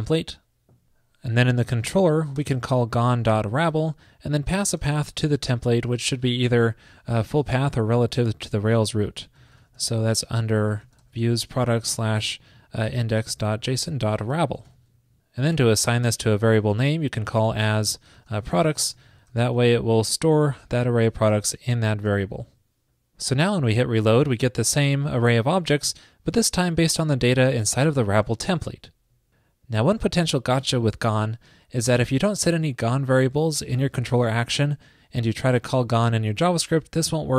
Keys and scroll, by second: 2.4 shift+super+Left, 2.6 alt+shift+Right, 2.9 alt+shift+Right, 14.8 super+s, 19.5 alt+shift+Left, 22.2 super+s.